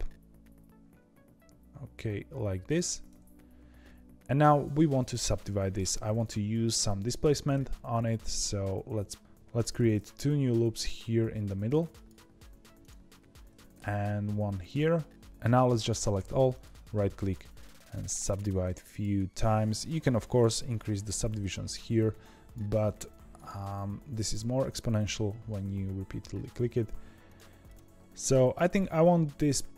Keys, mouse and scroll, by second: 5.1-7.5 middle drag, 7.5 ctrl+r, 13.7 ctrl+r, 16.1 a, 16.4-20.2 right drag, 20.2 click, 21.3-23.3 drag, 23.3-29.7 right drag.